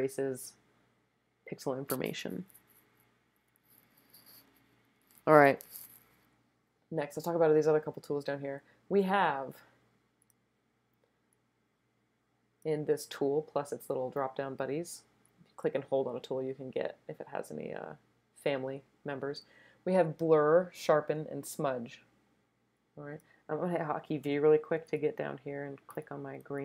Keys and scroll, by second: 24.2 v, 26.4 super+space.